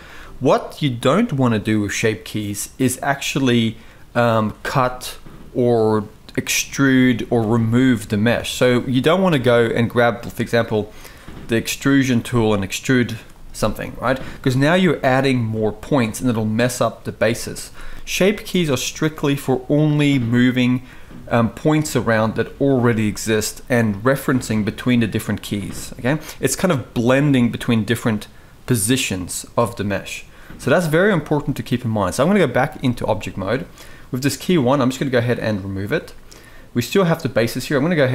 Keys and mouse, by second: 12.4 e, 17.0 ctrl+z, 18.3 ctrl+z, 32.5 Tab, 35.1 click, 35.8-36.1 shift+middle drag.